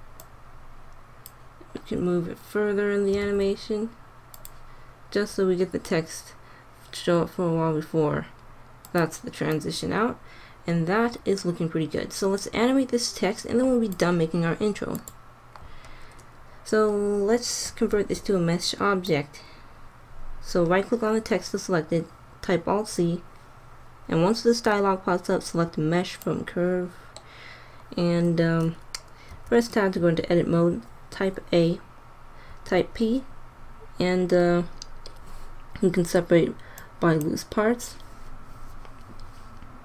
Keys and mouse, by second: 3.1 g, 8.8-11.4 drag, 15.0-17.9 drag, 17.9 alt+c, 29.3 Tab, 29.8 a, 32.4 p.